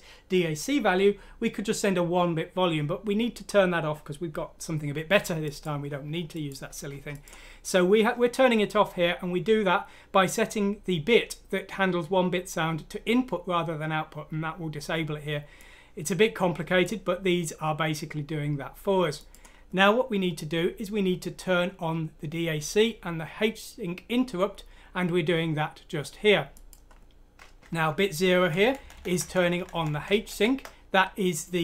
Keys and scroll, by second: 27.6 Left, 28.1-28.5 Left, 28.6 Left, 28.8 Left, 28.9 Left, 29.1 Left, 29.2 Left, 29.4 Left, 29.6 Left, 29.7 Left, 29.9 Left, 30.3 Right, 31.0 typing.